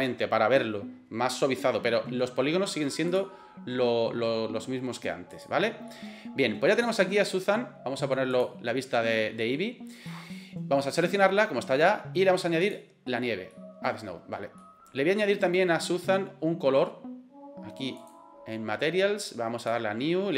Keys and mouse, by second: 3.1 click, 5.3 click, 5.9-6.4 middle drag, 7.0-7.4 middle drag, 8.3 click, 8.8-9.6 middle drag, 10.1 middle click, 11.0 right click, 12.7-13.2 drag, 13.5-13.9 middle drag, 14.6 middle click, 15.4 right click, 19.6 click.